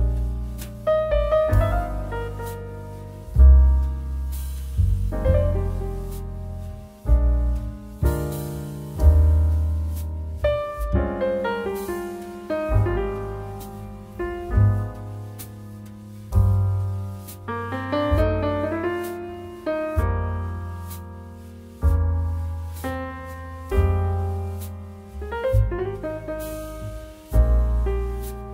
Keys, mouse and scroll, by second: 4.6 click, 8.1-18.0 drag, 19.5 click.